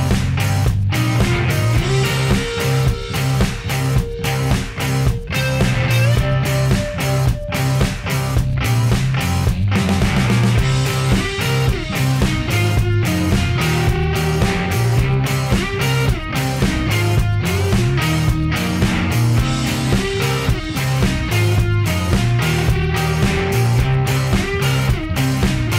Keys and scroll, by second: 0.9-1.8 typing, 2.7 Return.